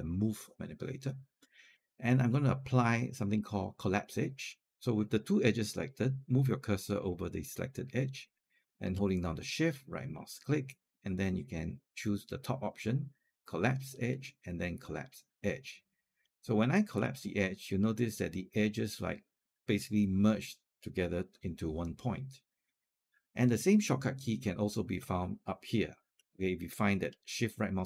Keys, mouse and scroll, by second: 9.3-12.3 shift+right drag, 27.6-27.8 shift+right drag.